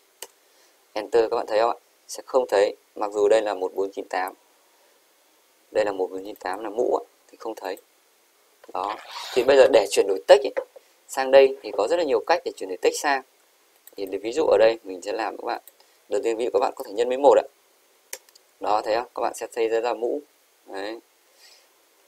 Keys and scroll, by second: 0.3 Return, 1.0 Up, 16.9 shift+8, 17.6 1, 18.2 Return, 18.8 typing.